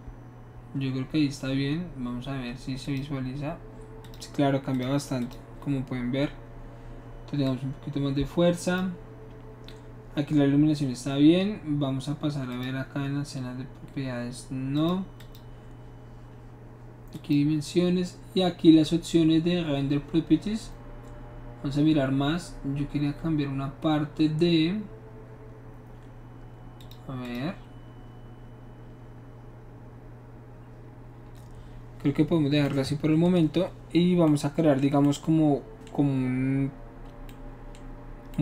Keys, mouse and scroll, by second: 2.8 click, 4.0 click, 4.7 click, 5.2 click, 7.4-8.8 drag, 12.5 click, 14.7 click, 15.1 click, 17.1 click, 26.8 click, 27.2 click.